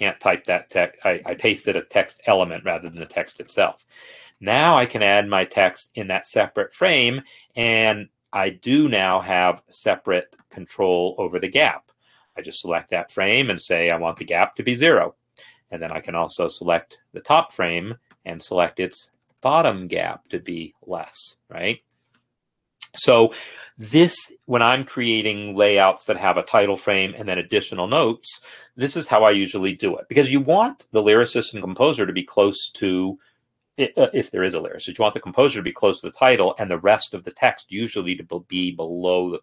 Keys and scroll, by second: 2.2-5.0 typing, 14.0 ctrl+a, 14.4 0, 19.0 Down, 19.2 Down.